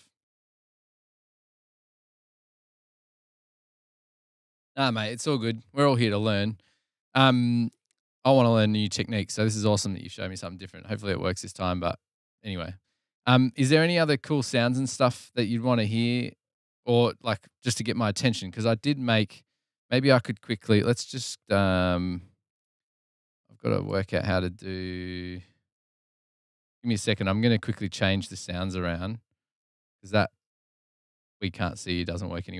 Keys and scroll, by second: 20.4 super+t, 23.7 Return, 23.7 typing.